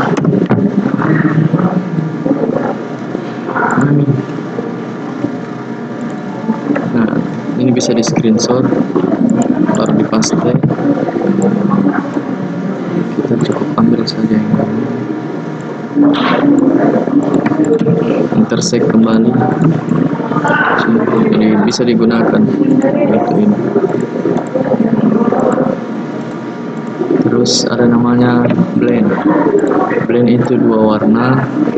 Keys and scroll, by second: 10.5 ctrl+v.